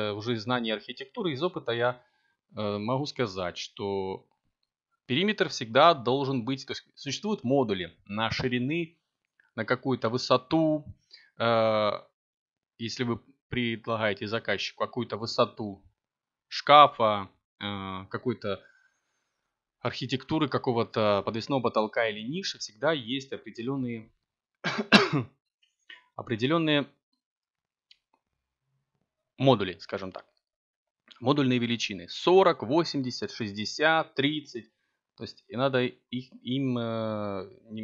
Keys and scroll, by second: 0.5 s, 1.8 x, 4.2 s, 9.5 a, 11.3 b.